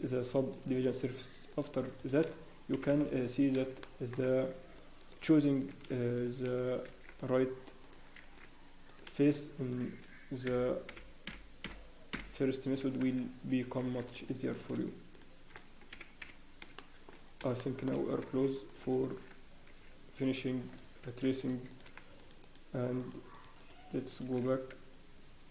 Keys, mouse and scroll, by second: 1.0 scroll down 1, 1.5 click, 1.5 scroll down 1, 1.9 shift+click, 1.9 scroll up 2, 2.7 f, 3.8 shift+middle click, 4.5 ctrl+r, 5.6 click, 6.1 shift+middle click, 6.8 ctrl+r, 9.2 click, 9.7 ctrl+shift+r, 9.7 shift+click, 10.4-12.3 f, 13.0 ctrl+z, 13.8 ctrl+z, 14.6 click, 15.1 shift+click, 15.9 f, 16.6 f, 16.7 shift+middle click, 17.1 scroll up 1, 17.5 shift+middle click, 18.2 ctrl+?, 18.9-19.7 scroll up 2, 19.7 ctrl+r, 21.3 ctrl+b, 21.7 click, 22.1 shift+click, 24.0 click, 24.3 shift+click.